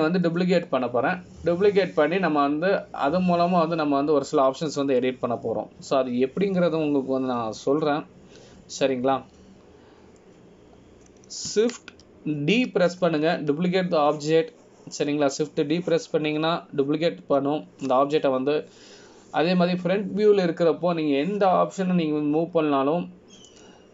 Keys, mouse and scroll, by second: 1.1 click, 14.7 shift+d.